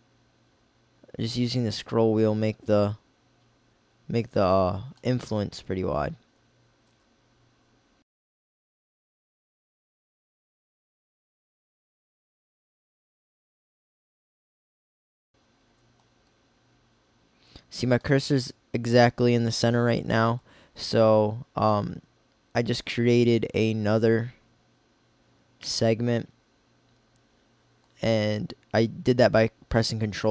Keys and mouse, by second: 6.2 KP_3, 7.0 g, 8.0 middle click, 9.0 middle click, 10.4 middle click, 12.3 ctrl+r, 18.0 middle click, 23.7-25.6 middle drag.